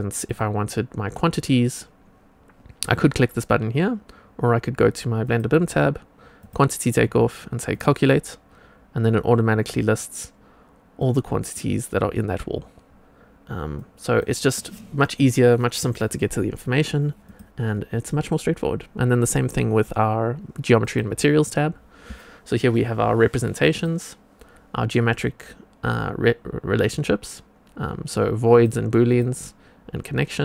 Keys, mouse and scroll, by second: 0.1 click, 5.2 click, 6.3 click, 7.6 click, 11.0 click, 13.7 click, 17.2 click, 20.7 click, 23.6 click, 28.4 click, 29.0 click.